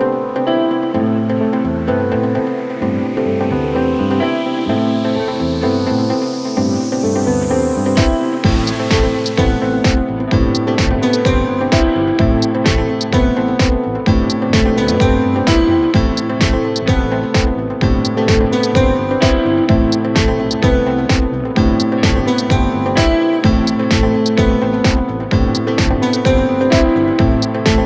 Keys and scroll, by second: 1.6 KP_Add.